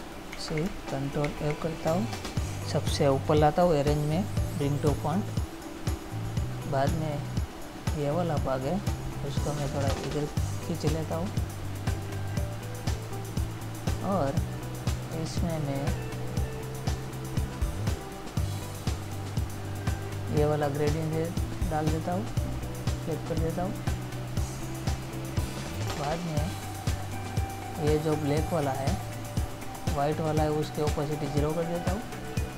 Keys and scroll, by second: 0.7 ctrl+c, 1.6 ctrl+f.